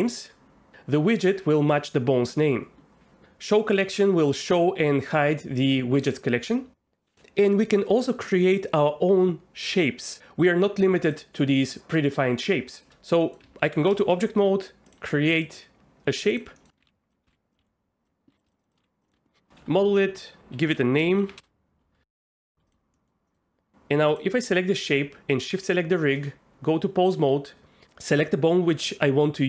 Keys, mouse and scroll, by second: 4.4 click, 6.0 click, 11.1-12.5 drag, 13.2 middle click, 13.4 Tab, 14.0 shift+a, 16.6 middle click, 16.8 Tab, 16.8-18.8 typing, 17.3 ctrl+z, 17.7 click, 18.6 shift+click, 18.7 shift+click, 19.1 click, 19.1 Tab, 19.6 F2, 22.1 middle click, 22.2 shift+middle click, 22.9 middle click, 23.3 middle click, 24.1 click, 25.6 shift+click, 26.5 Tab.